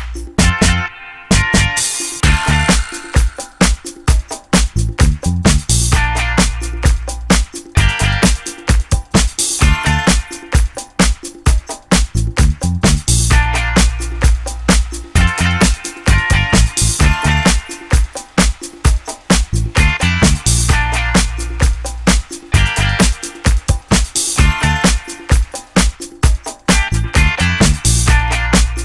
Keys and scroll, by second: 0.9 4, 1.1 BackSpace, 1.4 Return, 2.7 0, 2.8 Return, 5.3 ctrl+z, 10.7 Escape, 24.0 Escape, 24.8 Escape, 24.9 d, 25.4 6, 25.5 Return.